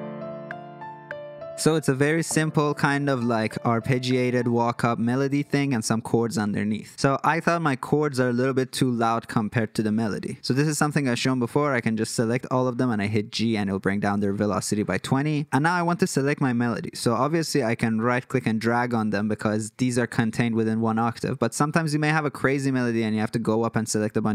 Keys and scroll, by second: 12.8 g.